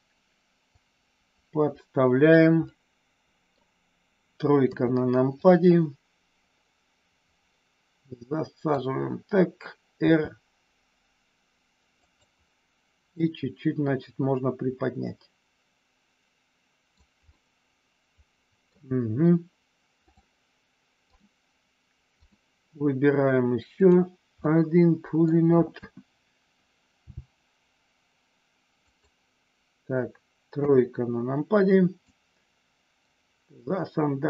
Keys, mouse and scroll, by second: 0.7-2.3 drag, 2.7 scroll up 1, 2.8 middle click, 4.5 KP_3, 5.3-8.7 drag, 10.0 r, 12.0 click, 13.2-16.9 drag, 17.3-18.7 middle drag, 19.9 click, 21.0 click, 23.8 click, 24.3 middle click, 25.8 KP_1, 27.0 g, 28.8 click, 30.5 KP_3, 32.0-34.2 drag.